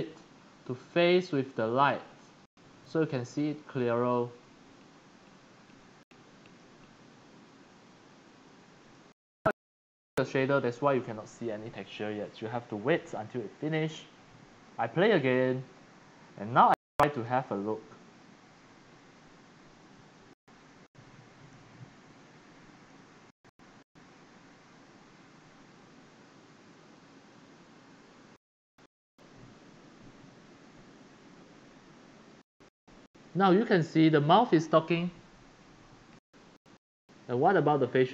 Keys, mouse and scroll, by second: 0.5-9.0 drag, 15.4 click, 19.1-19.9 typing, 21.6-27.3 typing.